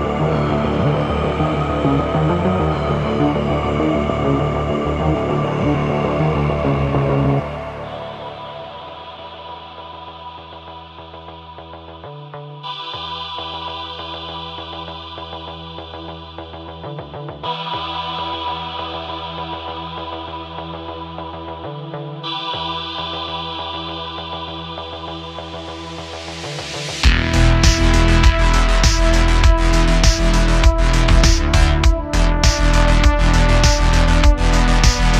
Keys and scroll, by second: 1.6 Tab, 3.8 Tab, 4.3 shift+d, 4.5 z, 6.3 x, 6.9 Tab, 7.3 q, 11.6 s, 13.0 `, 13.3 alt+z, 16.2 alt+z, 18.6 shift+a, 20.1 s, 21.9 Tab, 22.5 3, 23.4 i, 23.6 i, 25.8 e, 28.2 i, 28.9 e, 31.1 Tab, 32.9 Tab, 33.4 super+r, 34.7 3.